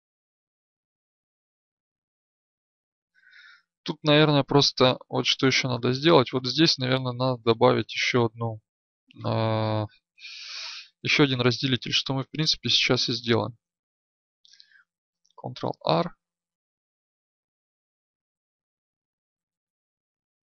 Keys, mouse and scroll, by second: 14.0 Tab, 15.6 ctrl+r.